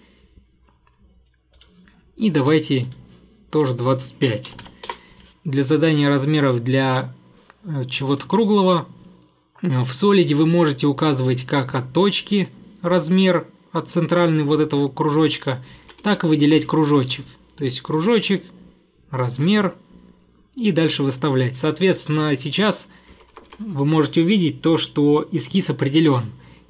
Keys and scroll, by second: 4.3-5.1 typing, 15.6 Escape, 15.8 Escape, 16.0 Escape, 23.1 Escape, 23.3 Escape, 23.5 Escape.